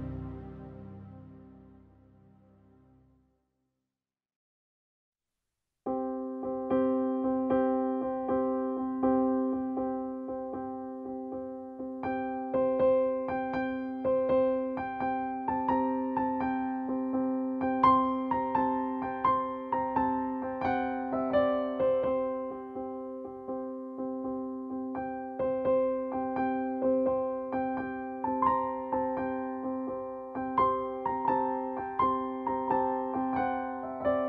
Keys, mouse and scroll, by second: 2.4 click, 3.9-7.3 drag, 11.4 typing, 12.3 Return, 13.5 click, 14.8 typing, 15.3 Return, 16.5 click, 19.7 click, 21.2 9, 21.6 Return, 22.9 click, 26.5 Down, 27.0 click, 29.4-31.8 drag, 31.8 ctrl+g, 33.2 click.